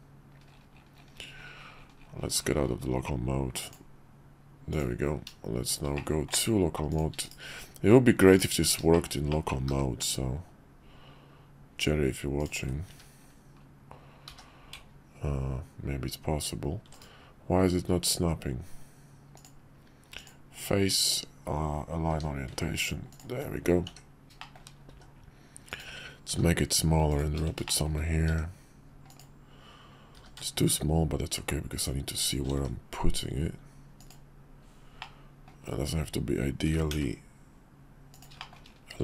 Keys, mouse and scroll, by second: 5.9-6.3 middle drag, 6.9 shift+click, 7.2 /, 8.3 click, 8.9 shift+middle click, 9.3 middle drag, 9.7 g, 14.2 g, 19.3-21.3 drag, 22.1 g, 23.9 s, 24.4 shift+middle click, 24.9 s, 26.3 g, 27.7 shift+middle click, 28.3 s, 30.1 g, 32.5 s, 35.0-35.5 middle drag, 36.6 g, 38.4 shift+middle click.